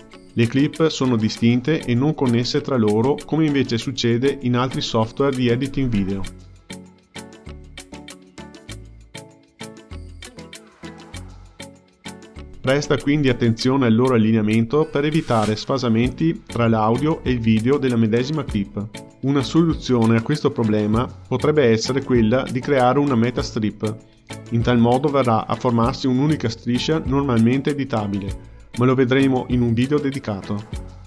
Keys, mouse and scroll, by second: 1.8-4.8 drag, 19.3 click, 20.8-22.0 drag, 22.0 ctrl+g, 23.3-24.9 drag, 24.9 k, 25.4-27.2 drag, 27.2 k, 27.6-29.1 drag, 29.1 k, 29.5-31.0 drag, 31.0 Tab.